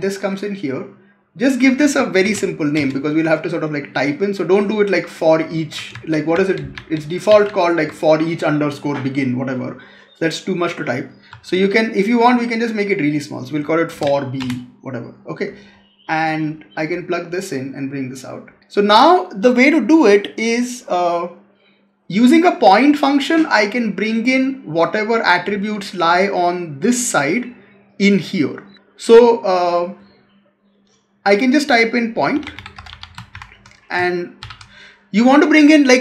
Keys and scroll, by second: 5.8 ctrl+z.